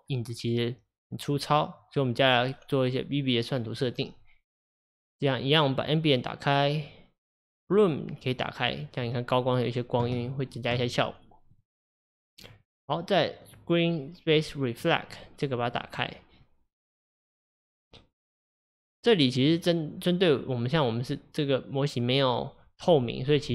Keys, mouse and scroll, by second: 0.1-3.1 scroll down 1, 3.7 click, 5.9 click, 7.8 click, 8.4 click, 8.7 click, 11.6 click, 11.9 click, 13.5 click, 14.3 click, 14.8 click, 15.1 click, 15.7 click, 16.0 click, 17.2-18.5 drag, 18.8 click.